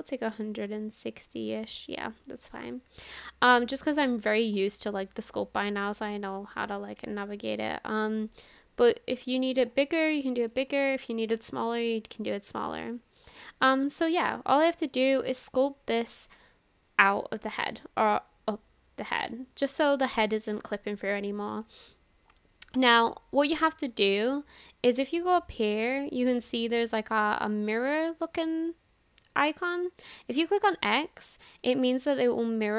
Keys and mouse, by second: 2.4-3.8 middle drag, 4.8 middle click, 5.3-7.0 drag, 7.5 ctrl+z, 8.0 shift+middle click, 9.3 click, 10.2 shift+middle click, 10.9-12.6 middle drag, 12.9 shift+middle click, 13.4 middle click, 14.4 shift+middle click, 14.7 middle click, 18.1 middle click, 19.2 middle click, 31.2 middle click, 32.2-32.7 drag.